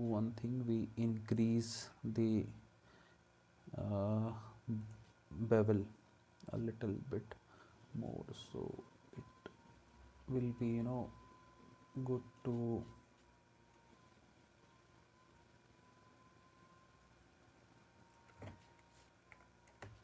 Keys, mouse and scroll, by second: 19.8 space.